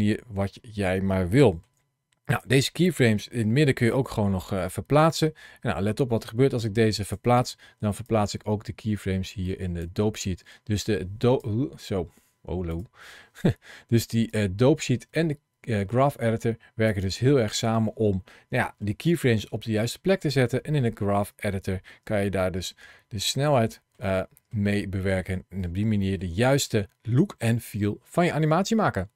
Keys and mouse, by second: 0.6 shift+middle click, 2.1 click, 3.5 g, 6.8 click, 7.4 ctrl+shift+a, 7.4 shift+c, 10.7 click, 12.6 click, 13.8 ctrl+shift+a, 18.4 shift+middle click, 19.1 shift+middle click, 20.4 shift+middle click, 21.2 shift+middle click, 22.5 shift+middle click, 23.6 shift+middle click, 24.0 middle click, 24.5 shift+middle click, 25.1 middle click, 25.9 shift+middle click.